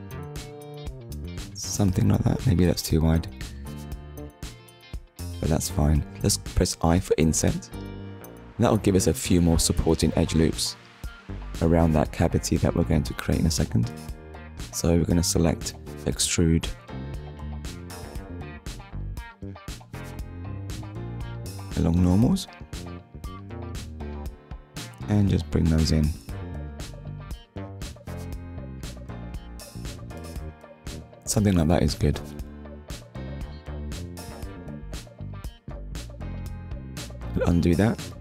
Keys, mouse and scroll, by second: 0.1 shift+click, 0.6 middle click, 8.2 click, 9.2 middle click, 15.7 click, 22.5 click, 31.5 middle click, 34.6 shift+middle click, 35.7 ctrl+z, 37.2 ctrl+z.